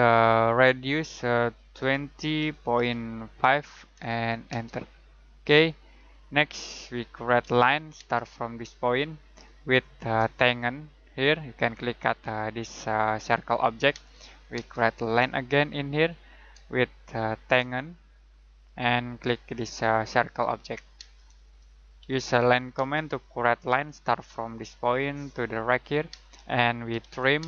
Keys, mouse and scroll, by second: 1.7-4.5 typing, 5.8 middle click, 6.8-7.4 scroll up 1, 7.4 l, 7.9 space, 8.9 click, 9.8 right click, 11.2 click, 13.9 space, 15.9 click, 17.1 shift+right click, 18.7 click, 20.9 space, 22.0 l, 22.7 space, 24.5 click, 26.1-27.4 typing.